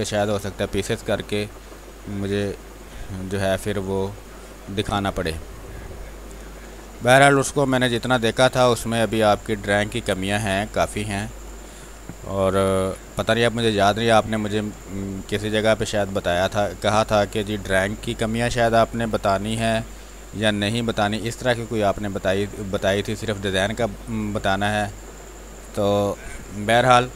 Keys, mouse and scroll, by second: 3.9 space, 4.3 click, 4.5 space, 6.1-7.5 drag, 7.5 space, 7.6 click, 8.0 space, 8.6 click, 9.3 space, 9.5 click, 9.8 space, 10.4 click, 11.4 space, 11.6 click, 12.1 r, 12.8 b, 13.4-14.7 drag, 14.7 space, 15.0 alt+click, 15.2 alt+click, 17.3 r, 17.8-19.2 drag, 19.2 b, 19.8 click, 20.2 space, 20.5-23.7 ctrl+drag, 23.7 space, 23.8 click, 24.1 space, 24.8 click, 26.1 space, 26.3 click, 26.6 space.